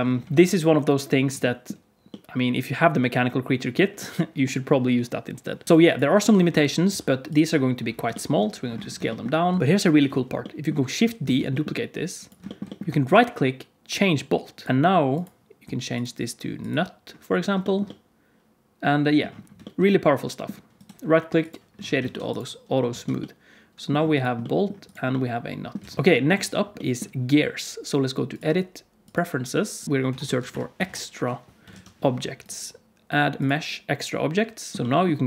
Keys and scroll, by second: 0.2 alt+a, 6.8 s, 9.4 s, 11.2 shift+d, 21.9 alt+a, 22.8 alt+a, 25.7 alt+a.